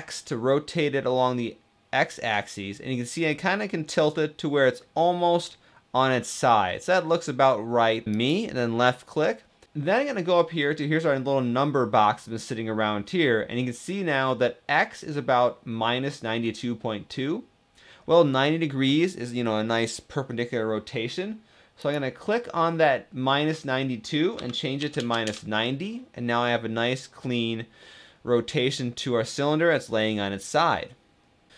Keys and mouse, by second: 21.5-25.5 drag.